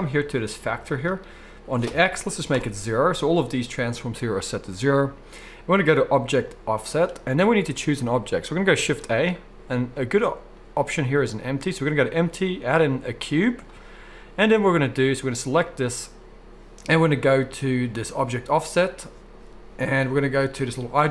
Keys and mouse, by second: 6.6-18.6 middle drag, 8.8 shift+a, 18.6-20.9 drag.